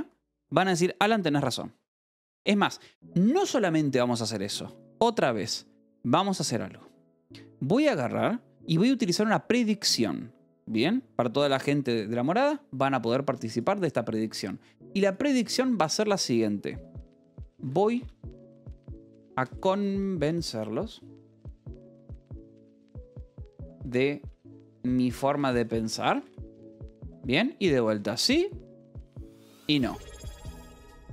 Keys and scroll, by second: 0.6 Escape, 17.2-26.4 typing, 27.0 Tab, 27.9 i, 28.3 Tab, 29.1 o, 29.6 Escape.